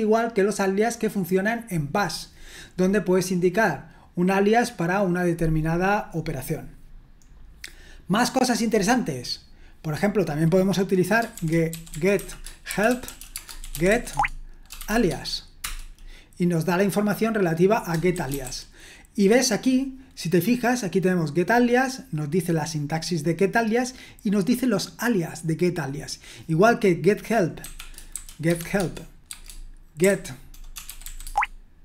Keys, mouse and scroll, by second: 6.1-7.3 scroll down 1, 7.3-8.0 scroll down 1, 8.3-8.9 scroll up 1, 10.0 click, 11.5-15.6 typing, 15.1 Tab, 15.6 Return, 18.1-19.0 typing, 24.2-26.5 drag, 28.2-31.8 typing.